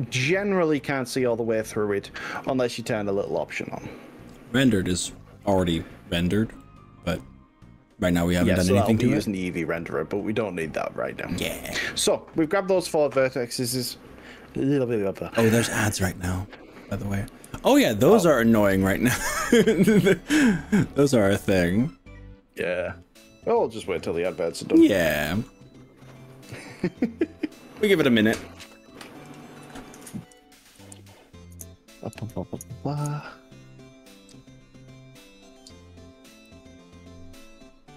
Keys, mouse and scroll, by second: 2.5 z, 6.7-8.7 middle drag, 8.9 z, 11.2-14.5 middle drag, 14.5 click, 20.5-25.5 middle drag.